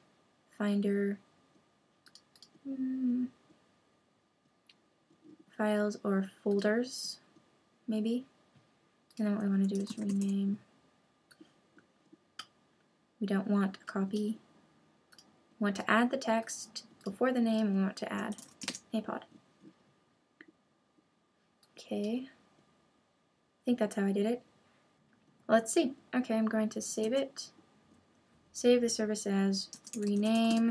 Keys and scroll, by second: 27.0 super+s.